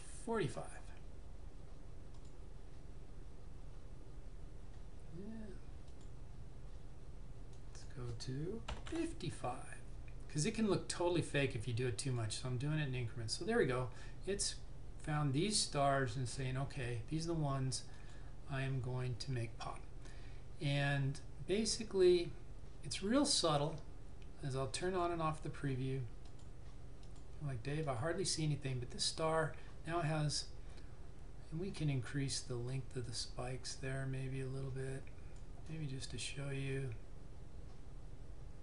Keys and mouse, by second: 2.3 click, 6.0 click, 8.7 typing, 12.2 click, 18.1 click, 24.9 click, 33.1 click.